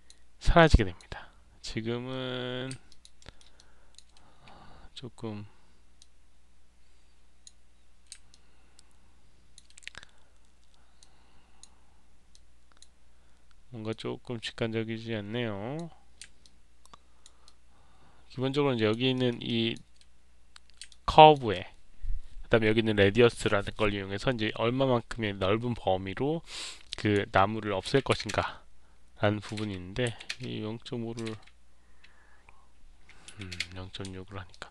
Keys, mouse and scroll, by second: 0.5 click, 2.8 alt+click, 3.1 alt+middle click, 3.5 alt+click, 5.9-7.3 drag, 8.2-9.5 alt+drag, 10.9 click, 12.2 click, 13.8-15.7 drag, 16.9 alt+click, 17.3-18.8 alt+drag, 19.0 alt+middle click, 19.4 alt+click, 20.8 alt+click, 26.5 click, 34.4 alt+click.